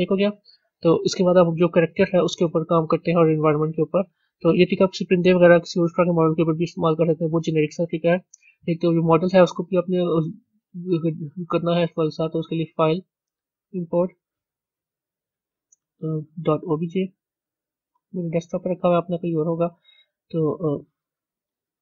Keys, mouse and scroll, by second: 1.2 KP_1, 5.7-6.8 drag, 6.8-8.2 middle drag, 8.2 scroll down 2, 16.7 click.